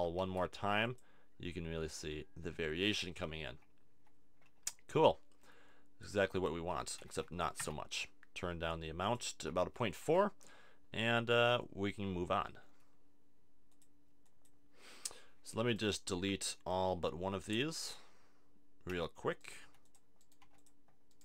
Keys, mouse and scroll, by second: 0.2 shift+d, 3.5 z, 4.7 z, 11.7-15.6 middle drag, 15.7-17.5 right drag, 17.5 middle click, 18.9 c, 19.5 middle click, 19.6 x, 20.4 x.